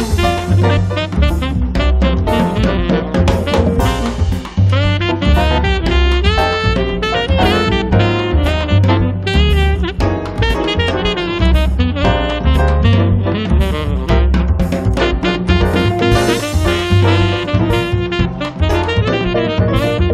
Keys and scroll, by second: 10.1 space, 11.2 p, 13.2 space, 15.5 Escape.